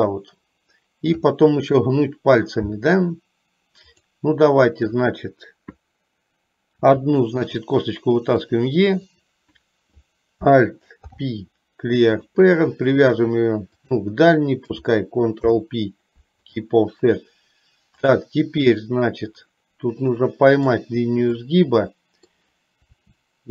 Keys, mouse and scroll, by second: 4.0 click, 6.9 e, 11.1 alt+p, 13.9 shift+click, 15.6 ctrl+p, 19.5-21.0 middle drag, 21.5-22.5 middle drag, 23.0 e.